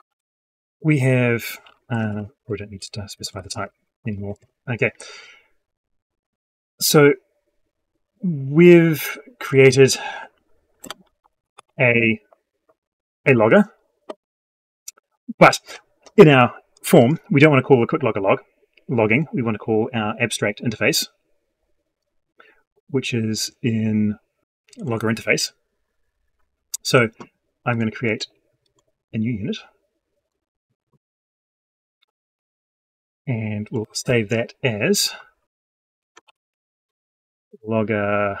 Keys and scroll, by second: 1.9 ctrl+shift+Right.